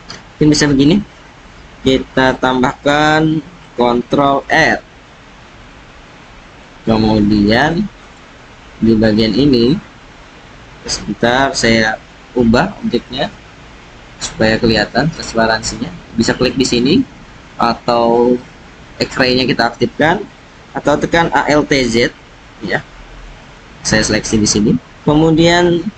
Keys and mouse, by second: 4.3 ctrl+r, 8.0-11.5 drag, 11.8 alt+z, 15.0 alt+z, 15.5 alt+z, 21.5 alt+z, 22.6 alt+z, 23.6-24.1 drag.